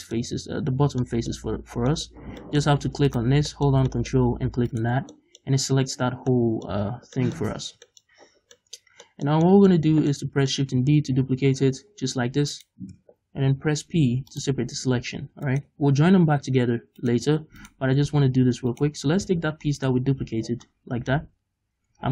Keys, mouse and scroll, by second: 1.5-2.5 scroll down 4, 3.1 right click, 3.5 shift+middle click, 4.3 middle click, 4.3-4.7 scroll up 2, 4.7 ctrl+right click, 5.0 scroll down 2, 5.2-12.6 middle drag, 6.2 scroll down 2, 6.8 z, 7.6 z, 8.2-8.6 scroll up 2, 9.4-10.1 scroll up 4, 11.2 shift+d, 12.6-13.9 right drag, 13.9 p, 15.1 Tab, 15.5 right click, 15.9 scroll down 2, 16.2 scroll up 2, 17.0 right click, 17.6 right click, 18.8 right click, 19.2 z, 19.8 right click, 20.2 z, 20.5 scroll down 2, 20.7 middle click, 21.2-21.9 scroll up 2, 21.9 Tab.